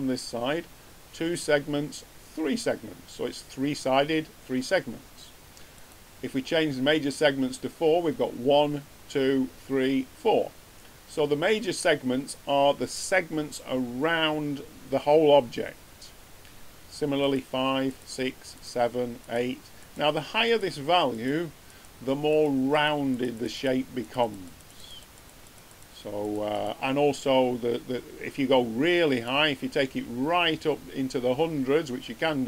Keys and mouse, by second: 5.7-7.5 drag, 17.2-28.4 drag, 29.2-31.0 drag.